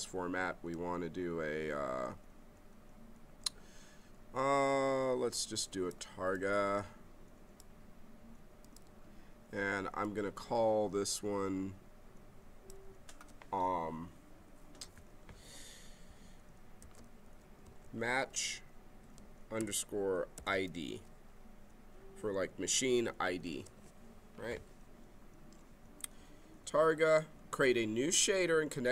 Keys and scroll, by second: 16.8 shift+m, 17.2 a, 17.8 h, 19.5-21.0 typing, 23.4 Return.